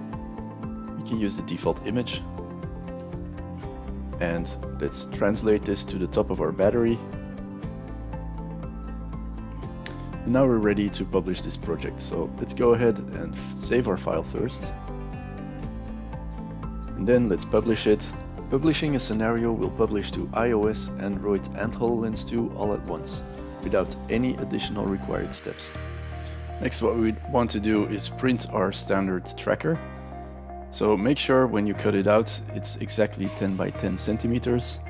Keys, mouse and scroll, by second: 7.2 alt+click, 7.6 alt+click, 7.9 click, 8.0 alt+click, 8.3 alt+middle click, 8.3 drag, 8.4 click, 8.7 alt+click, 9.0 alt+middle click, 9.0 alt+click, 9.2 alt+click, 10.5-11.2 alt+right drag, 11.3-11.7 alt+drag, 11.9 alt+right drag, 13.3 click, 14.3 click, 18.1 click, 19.2 click, 20.7 click, 24.1 click, 25.7 click.